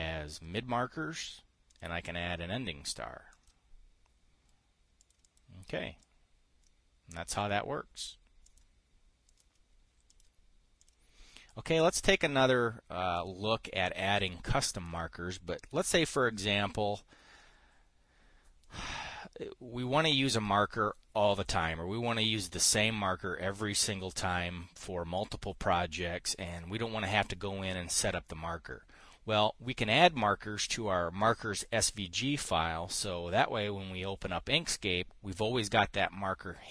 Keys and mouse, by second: 2.2 click, 5.5 click, 5.9 drag, 6.5-7.9 drag, 8.9 click, 9.8 click, 10.6 click, 11.3 click, 13.6 click, 14.7-15.4 drag, 16.2 Delete, 16.5 click, 16.8-17.8 drag.